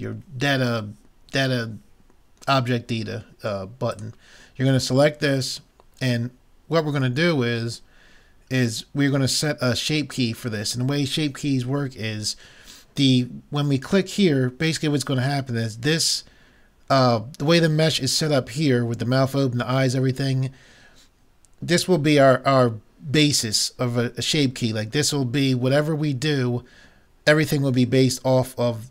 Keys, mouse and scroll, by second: 3.9-5.9 drag.